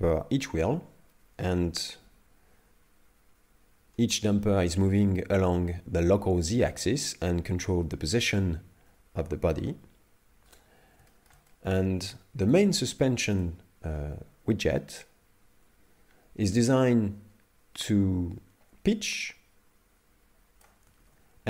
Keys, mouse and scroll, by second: 2.0 g, 8.6-9.5 scroll down 1, 9.5-11.1 scroll down 1, 9.5 g, 11.1 shift+middle click, 11.5 middle click, 12.7 right click, 13.0 shift+middle click, 19.2 click, 21.1 ctrl+z.